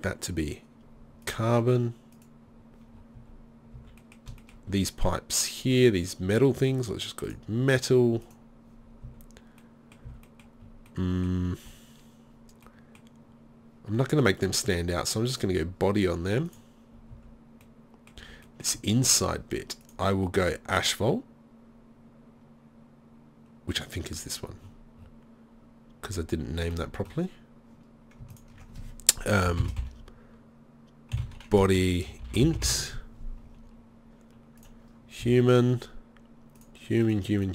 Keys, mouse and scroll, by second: 3.0 middle click, 3.2 z, 3.8 z, 8.4 right click, 9.1 z, 10.1 z, 17.2 z, 18.2 z, 19.9-21.5 drag, 34.7-35.2 right drag, 35.2 z.